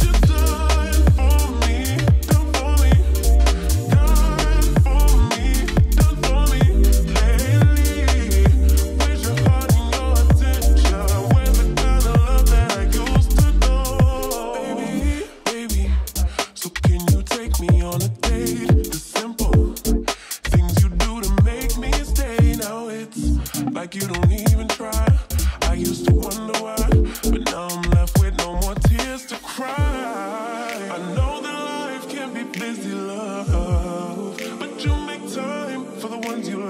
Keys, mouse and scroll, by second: 0.4 shift+click, 10.3 shift+click, 11.3 Delete, 12.8-14.1 drag, 15.4 ctrl+s, 16.3 space, 20.9-23.4 drag, 27.3-28.3 click, 28.2 space, 35.8-36.6 click.